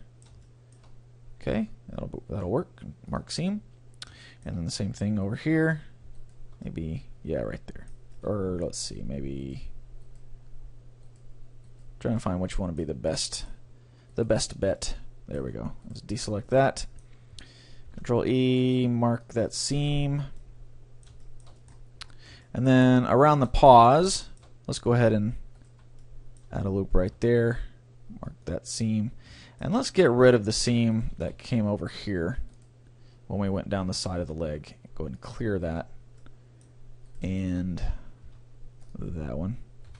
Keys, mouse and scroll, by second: 2.3 ctrl+e, 3.6 middle click, 3.8-4.2 scroll down 1, 4.2-6.1 middle drag, 5.3-8.0 right drag, 6.7-10.0 middle drag, 9.4-13.6 right drag, 12.2-13.8 middle drag, 14.2-18.4 middle drag, 14.2-15.8 right drag, 15.9-17.8 right drag, 20.4-25.6 middle drag, 25.6-27.4 middle drag, 25.6-27.4 right drag, 27.0 ctrl+e, 29.4-30.4 middle drag, 30.6 c, 31.0 click, 31.0-32.8 right drag, 31.2 a, 31.4 c, 32.6-34.3 drag, 34.2 ctrl+e, 35.7 a, 36.2-38.0 middle drag, 37.2-39.1 right drag, 38.3 ctrl+e, 39.9 a.